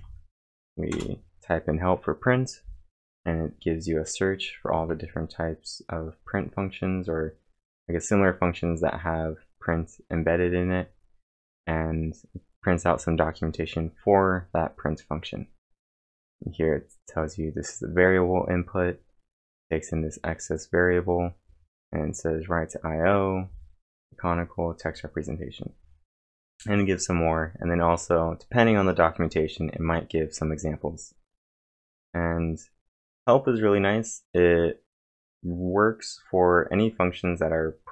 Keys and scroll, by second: 0.0-0.4 typing, 0.9 Return.